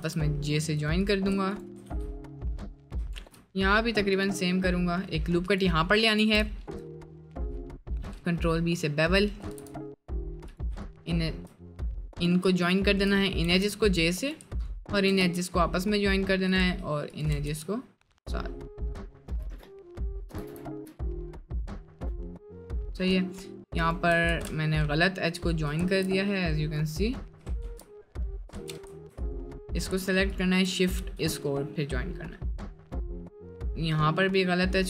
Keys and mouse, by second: 0.1 j, 0.1 k, 2.0 j, 2.1 middle click, 3.2 ctrl+r, 5.9 middle click, 6.5 ctrl+b, 8.5 middle click, 9.4 g, 13.6 j, 15.4 j, 17.6 j, 18.1 middle click, 18.6 middle click, 18.8 middle click, 20.1 shift+click, 20.5 j, 20.7 shift+middle click, 21.1 middle click, 23.1 2, 24.3 ctrl+z, 27.8 ctrl+x, 28.7 ctrl+x, 28.9 1, 31.1 j, 31.3 middle click, 32.1 middle click, 33.2 middle click, 34.2 middle click.